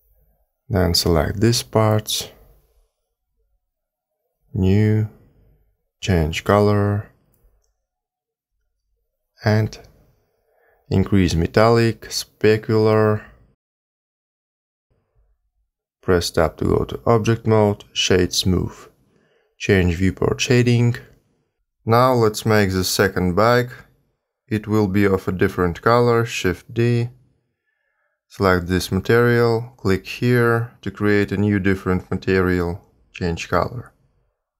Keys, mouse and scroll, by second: 0.5 l, 2.0 l, 4.4 click, 5.3 click, 7.0 click, 11.0 click, 12.6 click, 14.7 click, 16.0 Tab, 18.2 right click, 21.0 click, 23.2 shift+middle click, 25.0 shift+d, 28.2 click, 29.5 click, 30.8 click.